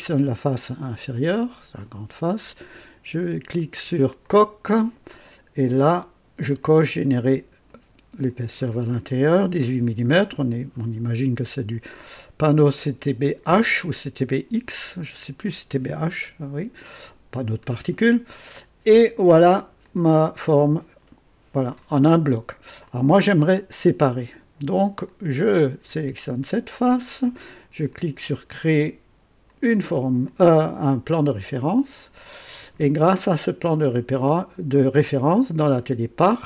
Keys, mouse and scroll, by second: 1.2-2.0 drag, 4.2 click, 6.6 click, 7.7 click, 9.5 KP_1, 9.8 KP_8, 13.5 KP_Enter, 15.4-19.8 drag, 20.0-21.9 drag, 22.9 click, 24.1-24.7 drag, 25.1 click, 27.9 click, 29.5 click, 30.3-32.0 drag, 33.6 click, 35.2 click.